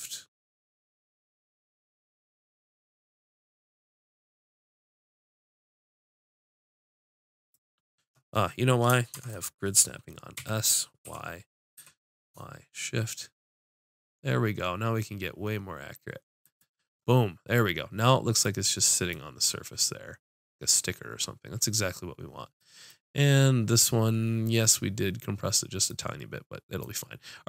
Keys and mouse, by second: 9.2 shift+Tab, 10.4 s, 27.0 middle click.